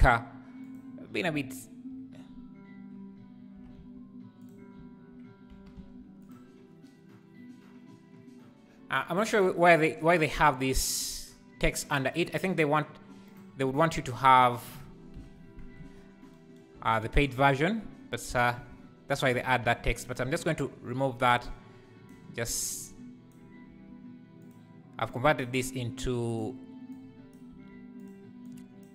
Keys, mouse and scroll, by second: 0.0 g, 4.6 scroll down 1, 5.5 g, 14.0-15.3 right drag, 15.3 Tab, 15.8 1, 18.7 click, 19.3 ctrl+l, 20.2 x, 22.1 click, 23.3 click, 23.7 g, 25.4 click, 25.8 g, 27.3 click, 27.5 g, 28.8 click.